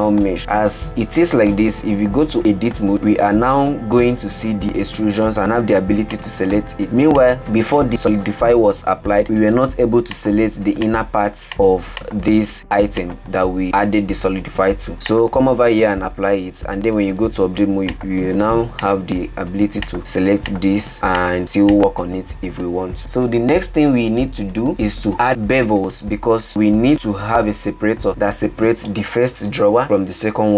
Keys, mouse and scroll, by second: 3.3 Tab, 3.7-4.7 scroll up 15, 4.7 click, 5.8 click, 6.5 click, 7.3 ctrl+z, 7.5 ctrl+z, 7.9 ctrl+z, 8.2 ctrl+z, 8.7 ctrl+z, 9.2 ctrl+z, 10.4 Tab, 10.7 click, 11.5 click, 12.8 click, 14.2 Tab, 15.1 click, 16.0 ctrl+a, 17.1 Tab, 18.0 click, 18.9 click, 19.9 click, 20.5 click, 21.2 click, 21.8 click, 23.0 Tab, 25.9-28.0 scroll down 15, 28.0-30.5 middle drag.